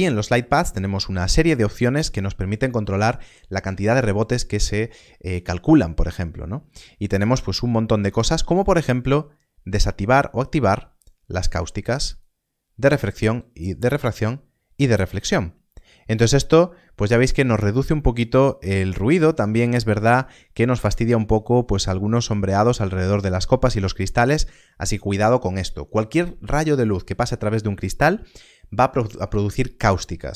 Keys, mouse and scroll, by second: 1.2 click, 11.2 click, 18.6 click.